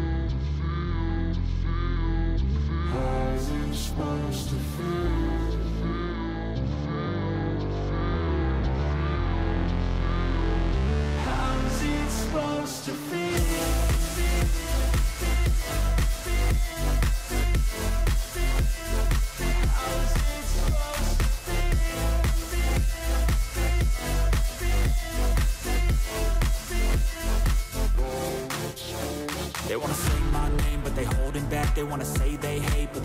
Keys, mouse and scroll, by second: 17.8 right click.